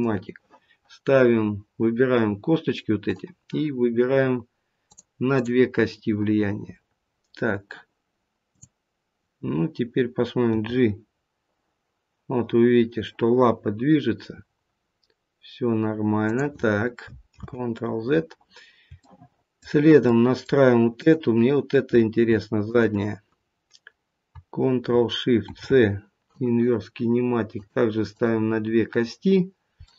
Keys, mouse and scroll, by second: 0.0 ctrl+shift+c, 3.0 click, 4.8 click, 6.4 click, 6.4-8.3 scroll down 1, 8.3-8.8 scroll down 1, 9.5 click, 10.4 g, 17.2 ctrl+z, 19.0 shift+middle click, 20.0 middle click, 20.9 click, 22.6 shift+click, 25.3 ctrl+shift+c, 27.5 click, 28.0 click, 29.8 middle click.